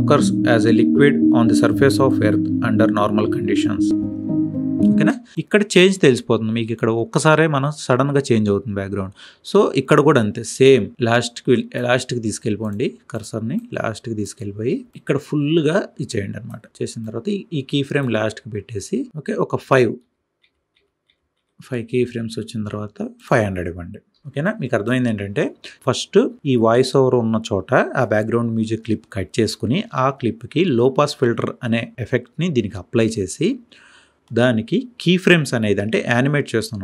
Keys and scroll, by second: 4.8 space.